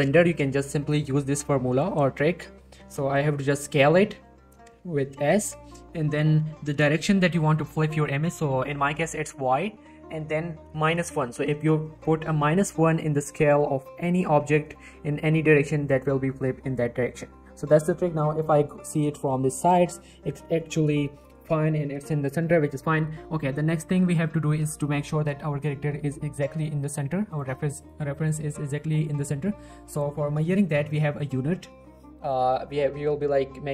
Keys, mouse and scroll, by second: 3.7 s, 9.4 y, 13.3 y, 13.6 middle click, 14.2 g, 14.4 right click, 14.6 middle click, 14.8-15.9 scroll up 1, 15.9 middle click, 16.1 g, 16.4 right click, 16.6 middle click, 17.1 scroll down 1, 17.2-17.7 middle drag, 19.1-20.0 scroll up 1, 20.0-20.5 middle click, 20.6-21.2 scroll down 1, 21.2 middle click, 23.4-24.9 scroll down 1, 24.9 middle click, 27.3 click, 27.5 g, 27.8 right click, 28.2 click, 28.4 g, 28.7 right click, 31.0 middle click, 31.7 scroll up 1, 32.1 shift+middle click.